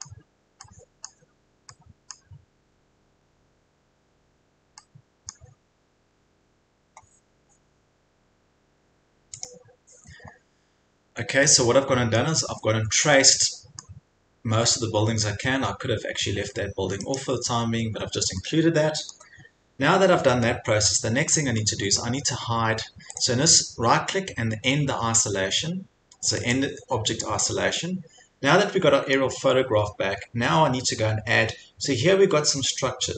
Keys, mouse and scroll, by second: 0.0 scroll, 1.0 scroll, 2.1 scroll, 3.3 scroll, 5.3 scroll, 6.2 scroll, 7.1-8.3 scroll up 5, 9.4 click, 12.2-13.3 scroll up 1, 13.8 scroll up 1, 14.5 scroll, 17.2 click, 17.6 Escape, 19.1 scroll, 19.6-20.1 scroll, 20.9 scroll, 22.0 scroll, 23.2 click, 26.6 click, 29.2-30.2 scroll.